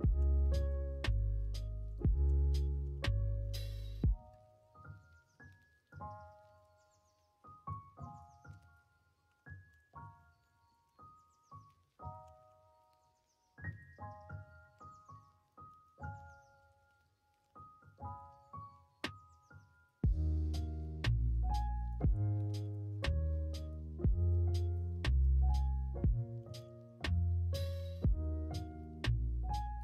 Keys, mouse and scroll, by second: 0.1 k, 3.0 shift+middle click, 3.8 middle click, 5.2 k, 9.1 1, 10.6 shift+click, 10.9 middle click, 12.1 g, 15.4 scroll up 1, 15.4 middle click, 17.2 2, 18.0 alt+click, 20.0 middle click, 21.9 shift+click, 22.6 shift+click, 22.9 middle click, 24.1 shift+click, 24.6 shift+click, 25.2 middle click, 26.3 g.